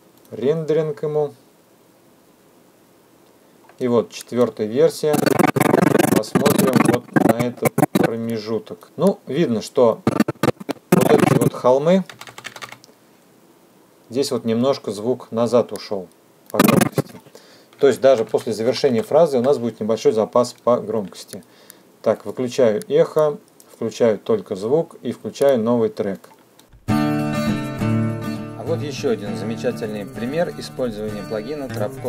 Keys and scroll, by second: 12.3 =, 17.7 Home, 18.0 -, 27.9 space.